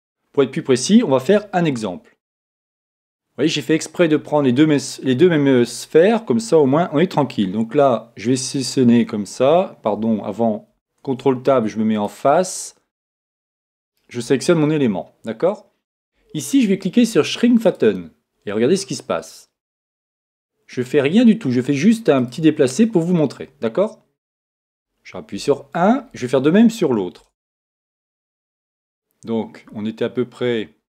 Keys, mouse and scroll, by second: 0.0-0.9 scroll up 1, 0.9-1.4 scroll up 1, 1.4-3.2 middle drag, 3.2-3.6 scroll up 1, 3.6-4.9 middle drag, 4.9-5.6 scroll down 1, 6.6 a, 8.5-10.2 right drag, 9.9 a, 11.0 ctrl+Tab, 13.8-15.7 right drag, 17.6-19.6 drag, 22.8-24.6 middle drag, 25.3 KP_1, 27.2 Tab, 27.6-29.4 right drag, 28.1 Tab.